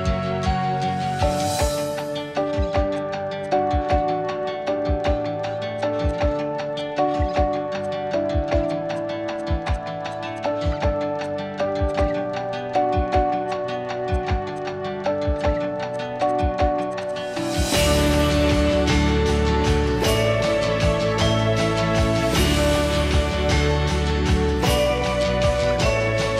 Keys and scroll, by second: 0.0 i, 5.0 ctrl+z, 5.5 Escape, 8.8 p, 9.9 e, 13.8 l, 16.0 ctrl+g, 20.9 m, 21.8 m, 25.3-26.1 typing.